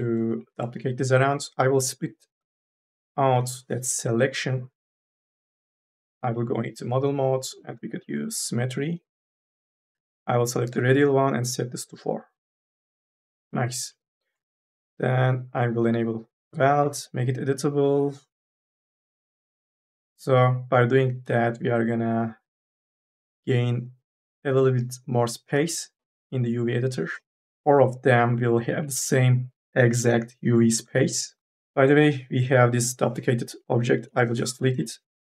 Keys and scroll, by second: 3.2 u, 3.6 p, 5.7 4, 16.6 c, 18.4 Delete, 20.8 3, 33.9 Delete.